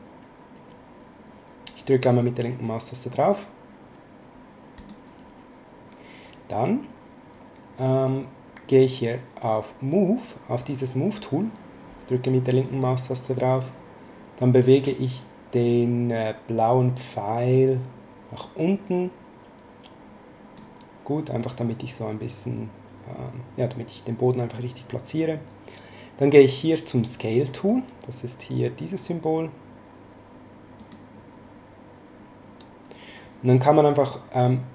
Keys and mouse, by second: 4.7 click, 12.6 click, 17.5 click, 30.8 click.